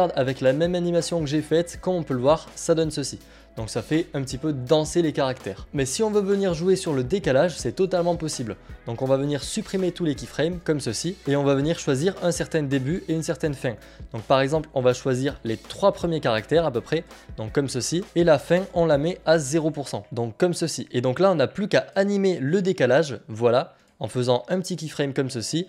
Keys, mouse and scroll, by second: 1.0 click, 2.0 click, 8.9 click, 13.2 click, 17.0 click, 20.0 click, 24.9 click.